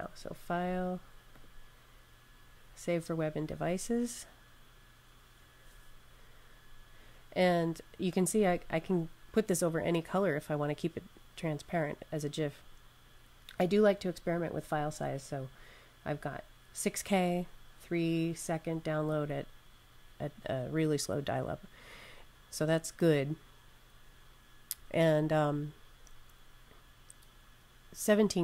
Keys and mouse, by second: 1.2 click.